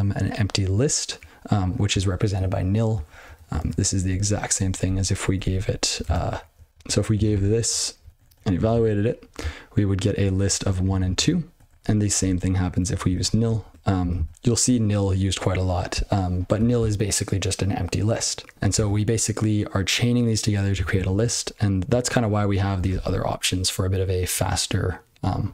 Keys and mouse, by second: 0.7 click, 1.2 click, 1.5 click, 3.1 ctrl+b, 3.2 ctrl+b, 3.5 ctrl+alt+space, 4.0 ctrl+e, 4.5 ctrl+b, 4.8 ctrl+g, 5.3 ctrl+g, 5.5 ctrl+b, 6.0 ctrl+space, 6.2 ctrl+b, 6.5 ctrl+b, 6.7 ctrl+p, 6.7 ctrl+n, 7.3 ctrl+c, 7.7-8.0 ctrl+n, 8.1 ctrl+p, 8.2 ctrl+p, 8.7 ctrl+c, 10.2 ctrl+f, 10.6 ctrl+n, 10.8 ctrl+n, 11.2 ctrl+n, 11.3 ctrl+p, 11.5 ctrl+p, 11.7 ctrl+p, 11.8 ctrl+b, 12.1 ctrl+w, 12.7-14.0 typing, 14.2 ctrl+c, 16.2 ctrl+b, 16.4 ctrl+b, 17.9 ctrl+b, 22.0 ctrl+n, 22.2 ctrl+g.